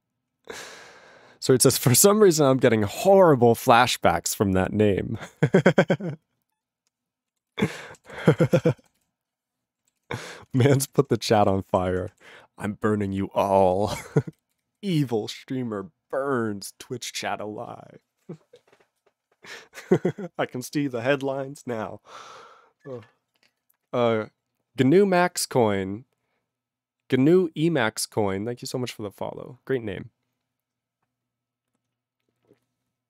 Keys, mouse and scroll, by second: 7.3 ctrl+a, 7.5 ctrl+space, 7.6 ctrl+g, 8.1 ctrl+s, 8.2 ctrl+space, 8.3 ctrl+a, 8.5 ctrl+g, 8.5 ctrl+e, 9.0 ctrl+s, 10.0 ctrl+s, 10.2 ctrl+a, 10.4 ctrl+space, 10.5 ctrl+e, 10.6 ctrl+g, 11.0 ctrl+s, 11.2 ctrl+a, 11.3 ctrl+space, 11.4 ctrl+e, 11.4 ctrl+g, 11.9 ctrl+s, 12.1 ctrl+a, 12.6 ctrl+a, 13.4 alt+f, 13.6 alt+f, 13.7 alt+f, 13.8 alt+f, 14.0 alt+f, 14.3 alt+f, 14.6 alt+f, 14.8 alt+f, 15.0 alt+b.